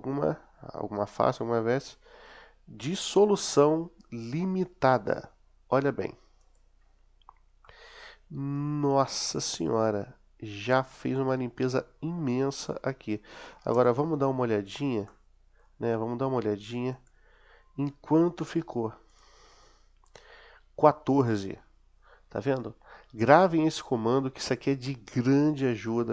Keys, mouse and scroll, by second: 7.5-11.4 middle drag, 13.6 Tab, 15.1 middle click, 16.9-19.2 drag, 25.8-26.1 middle drag.